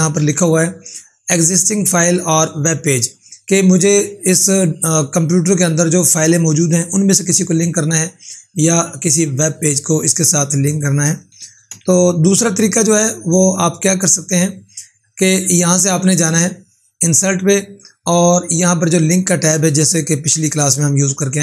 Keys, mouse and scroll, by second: 0.3 ctrl+4, 11.6 4, 15.1 click.